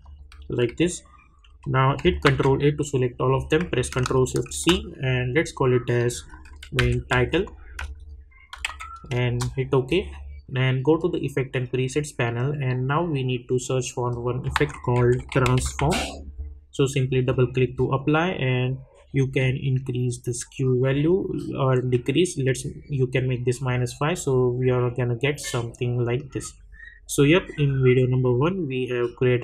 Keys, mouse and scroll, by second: 0.7-1.5 typing, 2.2 ctrl+a, 4.4 ctrl+shift+c, 6.2-9.1 typing, 9.2 Return, 11.0 click, 14.1 click, 14.5 ctrl+a, 14.7-16.3 typing, 17.1-23.1 drag, 24.6-29.4 drag.